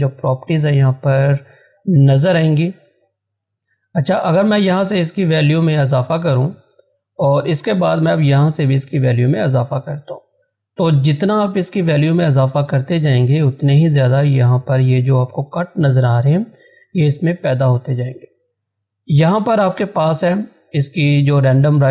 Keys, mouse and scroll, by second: 3.8 click, 12.5 click.